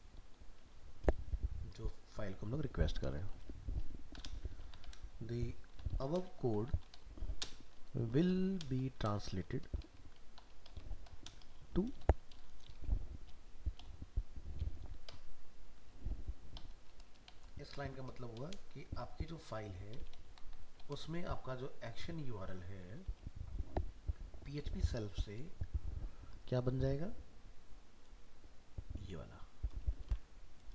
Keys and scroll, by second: 17.7 ctrl+c, 18.9 ctrl+v, 30.0 ctrl+c.